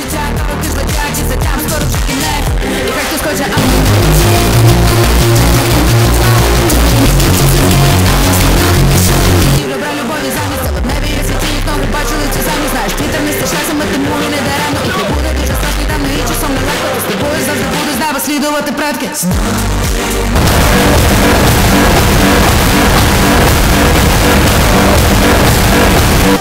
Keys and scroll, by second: 26.3 space.